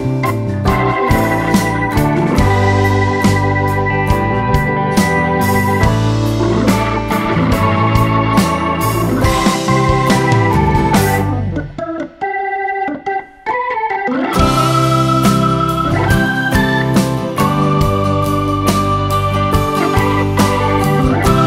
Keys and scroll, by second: 8.9 space, 19.0 super+z.